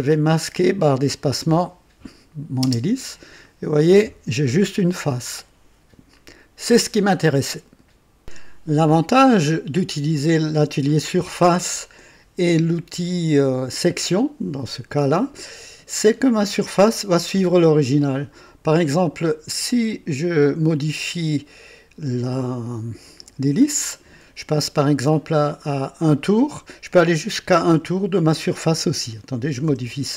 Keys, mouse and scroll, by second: 0.3 click, 2.6 space, 3.4-7.0 drag, 8.2 click, 16.4 click, 18.7 click, 21.4 click, 29.6 KP_1.